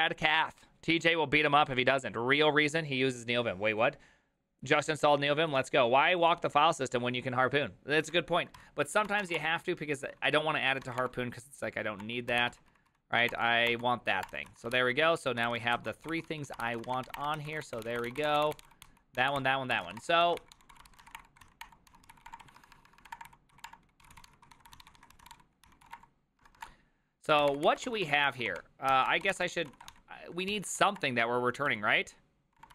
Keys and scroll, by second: 9.0-17.8 typing, 16.6 ctrl+c, 17.8 ctrl+n, 17.9 ctrl+h, 18.1 ctrl+t, 18.4 ctrl+n, 18.6 ctrl+t, 18.6 ctrl+h, 19.2 ctrl+h, 19.2 ctrl+t, 19.2-32.7 typing.